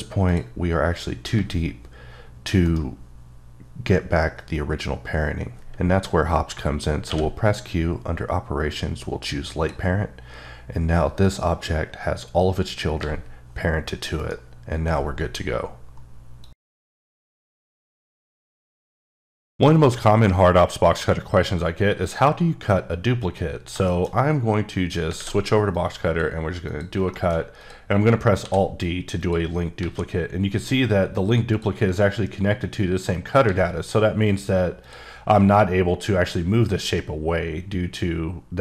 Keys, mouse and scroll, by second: 0.3 click, 1.3 g, 2.6 right click, 7.1 q, 9.3 click, 13.0 g, 14.2 right click, 24.8 scroll up 1, 25.2 alt+w, 25.7 click, 26.7 click, 27.1 middle click, 27.6 click, 28.4 alt+d, 29.2 click, 29.8 g, 31.5 click, 33.4 g, 34.8 click, 35.3 g.